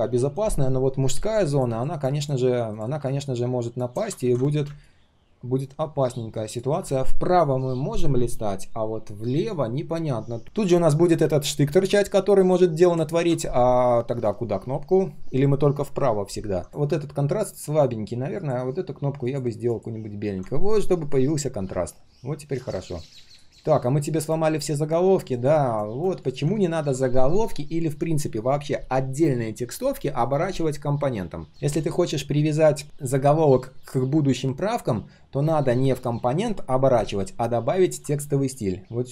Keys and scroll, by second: 4.2 ctrl+z, 13.1 ctrl+z.